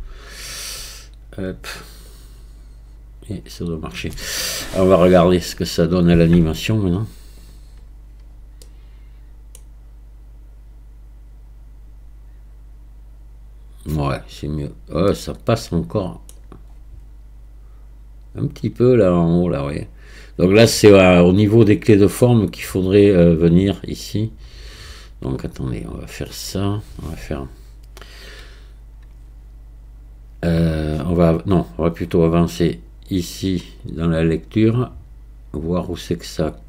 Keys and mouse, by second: 2.2-3.4 drag, 7.5 drag, 8.6 click, 8.7-9.7 middle drag, 15.1-16.3 middle drag, 24.1 click, 26.8-28.3 drag, 32.1 click, 33.1 click, 33.8-36.6 drag.